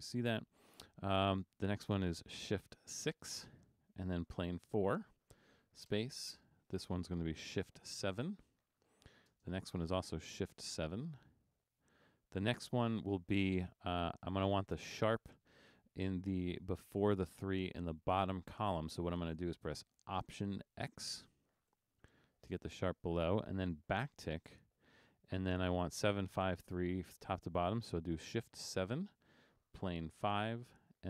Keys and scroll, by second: 3.3 shift+6, 4.7 4, 6.0 space, 8.1 shift+7, 9.4 space, 11.0 shift+7, 12.7 space, 21.8 alt+x, 24.6 `, 28.9 shift+7, 30.3 5.